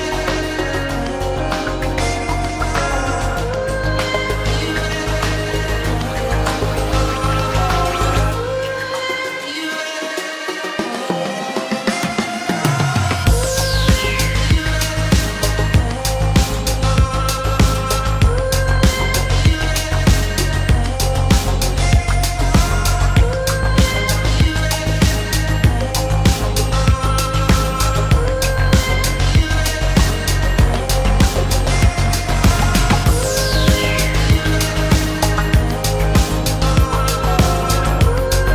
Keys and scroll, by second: 11.7 shift+space, 22.6 p, 26.0 space, 27.2 p, 28.4 space, 29.7 ctrl+g, 33.5 m.